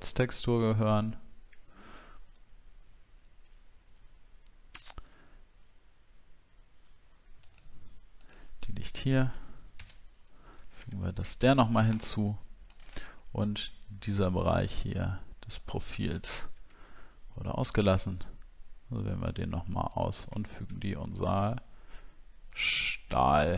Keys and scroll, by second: 9.8 ctrl+BackSpace, 10.5 ctrl+d, 10.9 alt+scroll down 1, 13.1 alt+scroll up 6, 23.2 alt+scroll down 1.